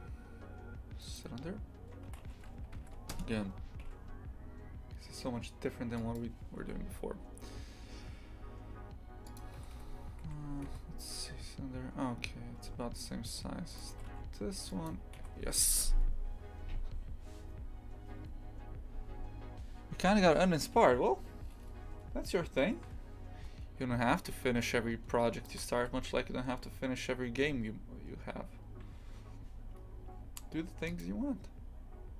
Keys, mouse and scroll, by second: 1.2 shift+a, 2.1 r, 6.6 s, 9.6 g, 10.8 z, 12.6 s, 15.3 z.